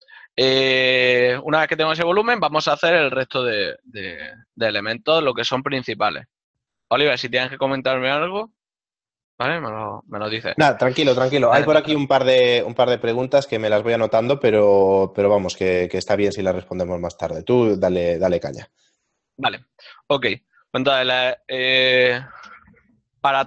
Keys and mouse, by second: 14.9 right click, 16.7 click.